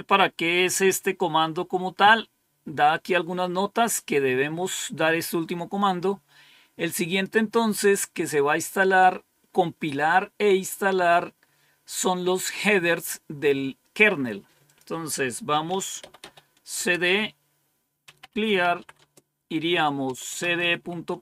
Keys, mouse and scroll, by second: 7.0 click, 14.6 click, 15.7-16.6 typing, 16.7 Return, 17.9-21.2 typing.